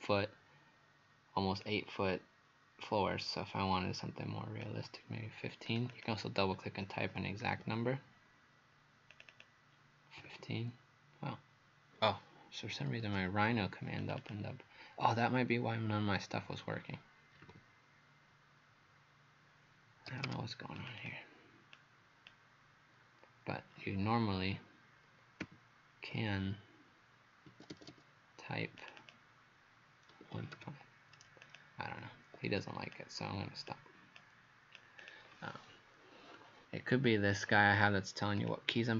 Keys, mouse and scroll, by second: 1.6 click, 5.9 click, 7.4 KP_1, 7.6 KP_5, 9.1 click, 9.3 click, 10.2 KP_1, 10.3 KP_5, 12.8 Escape, 13.1 Escape, 14.0 click, 14.2 click, 17.4 KP_1, 17.5 KP_5, 20.1 Escape, 20.3 Escape, 20.8 click, 21.0 click, 21.8 click, 24.3 KP_1, 25.4 KP_5, 27.5 Escape, 27.7 Escape, 28.8 click, 29.0 click, 30.3 typing, 31.5 click, 32.3 Escape, 32.9 click, 34.2 click.